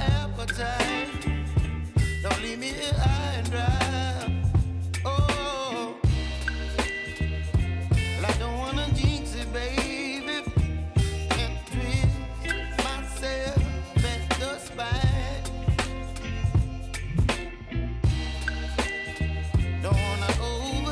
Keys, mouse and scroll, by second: 0.0-1.4 typing, 1.1 click, 2.4-11.6 drag, 11.6 j, 14.0-18.6 drag, 18.6 F9, 19.0 click, 20.4 Return.